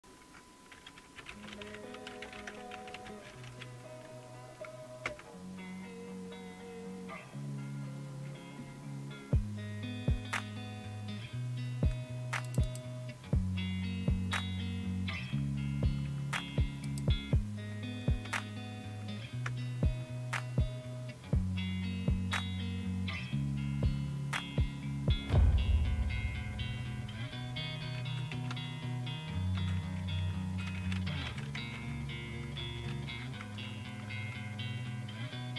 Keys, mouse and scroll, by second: 0.0-3.6 typing, 5.1 Return, 12.5 click, 16.9 click, 19.5 Return, 30.2-34.1 typing.